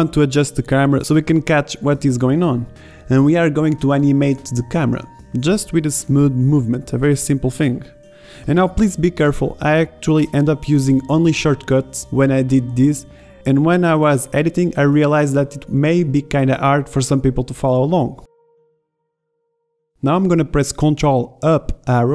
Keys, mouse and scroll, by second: 5.6-6.8 middle drag, 7.0 middle drag, 8.9-9.8 middle drag, 11.0-13.7 middle drag, 16.0 KP_0, 17.6 shift+Left.